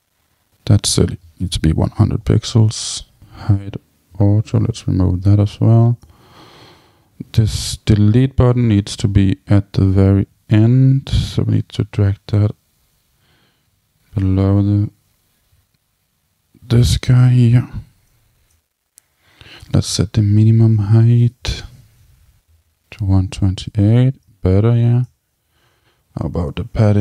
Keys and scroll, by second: 1.9 Tab, 4.0 Tab, 21.2 Tab, 22.1 super+v, 22.7 Tab.